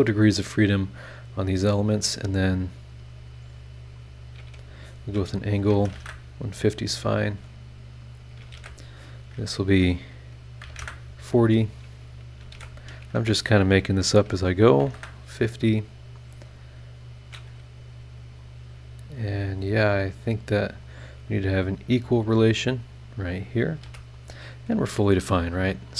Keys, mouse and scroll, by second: 0.3-1.1 drag, 3.1 click, 3.9 click, 4.4 a, 5.7 KP_1, 5.8 KP_5, 5.9 KP_0, 6.0 KP_Enter, 6.8 scroll down 2, 7.3 scroll up 2, 8.1 shift+click, 8.5 shift+h, 10.6 KP_4, 10.7 KP_0, 10.8 KP_Enter, 12.1 shift+click, 12.5 shift+h, 14.7 KP_5, 14.8 KP_0, 14.9 KP_Enter, 16.4 click, 18.4 click, 19.5 click, 20.7 click, 21.9 scroll up 1, 23.0 click, 23.4 scroll down 1, 23.8 e.